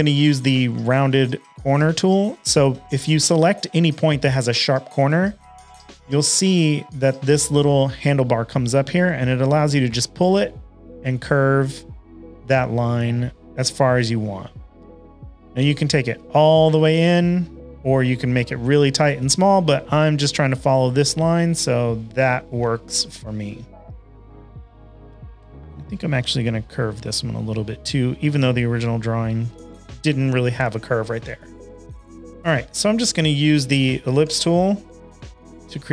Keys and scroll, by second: 22.4 shift+super+a, 22.8 v, 25.1-25.8 typing, 29.4 shift+super+a, 29.6 v, 33.9-34.7 typing.